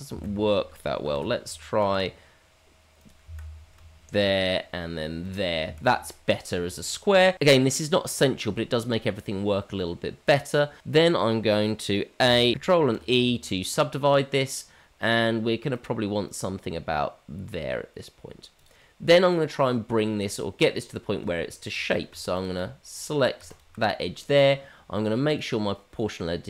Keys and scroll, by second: 1.0 ctrl+z, 1.8 ctrl+r, 4.2 ctrl+r, 12.2 a, 12.8 ctrl+e.